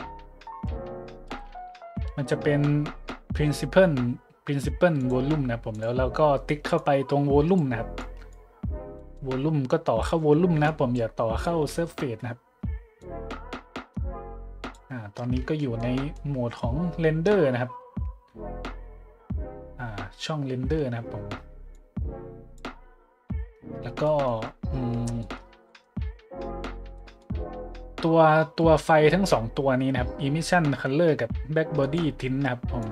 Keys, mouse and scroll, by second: 1.2 ;, 5.0 click, 5.7-6.1 drag, 6.7-7.6 drag, 7.9 click, 8.9-9.3 middle drag, 10.6 click, 11.6-12.0 middle drag, 13.0-14.7 drag, 15.6-15.9 shift+middle drag, 16.0 middle click, 16.3 middle click, 17.4-17.7 scroll up 2, 20.5 scroll up 1, 21.7-22.6 drag, 23.7 middle click, 24.0 middle click, 24.5 middle click, 25.2-25.5 middle drag, 25.7-26.0 drag, 26.9 click, 31.8-32.2 drag, 32.8 click.